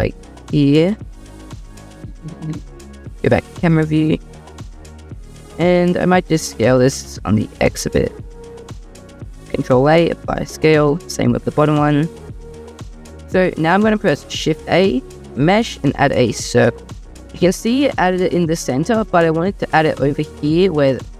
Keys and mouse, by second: 0.9 click, 1.9 click, 3.4 click, 6.4 s, 6.8 x, 9.1 click, 9.5 ctrl+a, 11.5 ctrl+a, 14.5 shift+a, 18.1 ctrl+z, 18.1 typing.